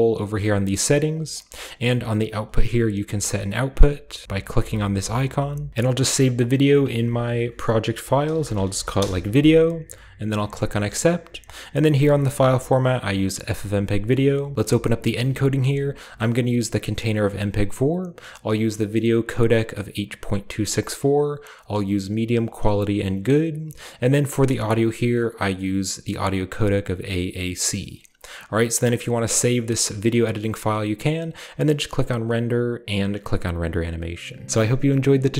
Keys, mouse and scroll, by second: 0.3-1.2 scroll down 1, 1.2-6.8 drag, 8.3-8.8 typing, 9.2 Return, 10.4 click, 11.3-12.8 scroll down 1, 12.8 click, 13.2 click, 14.5-15.8 scroll up 1, 15.8-16.5 scroll down 1, 16.5-17.8 scroll down 1, 23.4-24.5 scroll down 2, 24.5-24.9 scroll down 1, 27.5-27.9 scroll down 2, 27.9-30.0 scroll up 3, 30.6-32.3 middle drag, 32.3-34.1 drag.